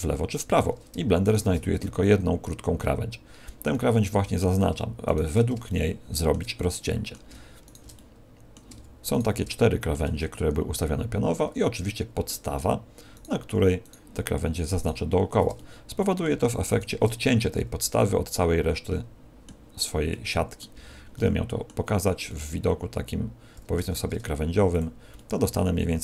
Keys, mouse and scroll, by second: 1.2 alt+shift+right click, 3.7 middle click, 5.0 alt+shift+right click, 5.6 shift+middle click, 6.5 middle click, 7.6 alt+shift+right click, 7.9 middle click, 9.1 alt+shift+right click, 9.5 shift+middle click, 10.2 middle click, 13.1 alt+shift+right click, 13.8 alt+shift+right click, 14.7 alt+shift+right click, 15.5 middle click, 16.6 alt+shift+right click, 17.4 middle click, 20.0 middle click, 20.7 z, 21.1 middle click, 21.8 scroll down 4, 22.2 middle click, 23.9 ctrl+Tab, 25.1 middle click.